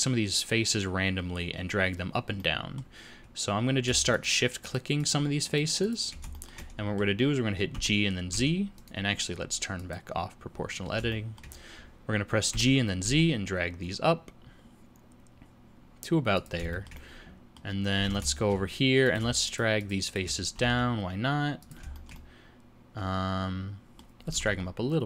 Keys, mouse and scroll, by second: 2.4 middle click, 4.1 shift+click, 4.6 shift+click, 5.0 shift+click, 5.5 shift+click, 5.8 shift+click, 6.3 shift+middle click, 7.7 g, 9.8 click, 11.1 shift+middle click, 12.5 g, 16.7 shift+middle click, 18.0 alt+a, 18.3 shift+middle click, 19.0 click, 19.5 shift+click, 19.8 shift+click, 20.1 click, 20.5 g, 21.9 shift+middle click, 22.1 middle click, 24.2 g.